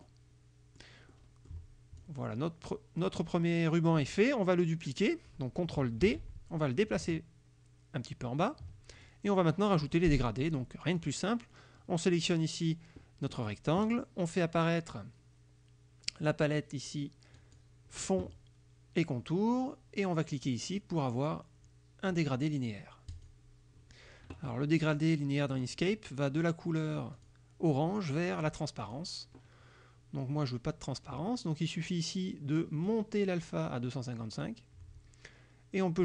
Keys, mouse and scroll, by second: 0.1 click, 1.2 click, 2.1-3.3 drag, 6.1 ctrl+d, 6.8-8.7 ctrl+drag, 9.0 ctrl+click, 11.1 click, 17.4 click, 23.2 click, 25.7 click, 27.2 click, 28.9 click, 32.9-34.7 drag.